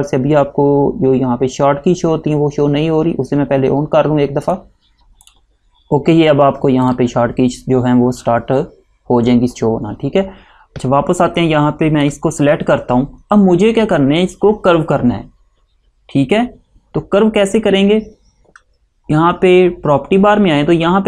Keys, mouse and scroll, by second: 5.4 click, 7.0 click, 11.5 click.